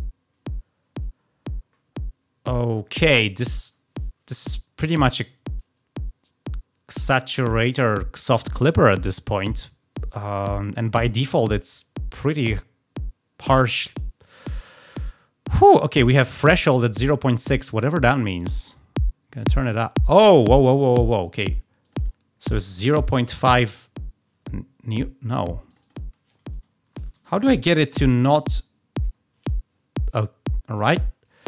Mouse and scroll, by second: 18.1-21.5 drag, 21.7 click, 21.9 click, 25.6 click, 25.8 click.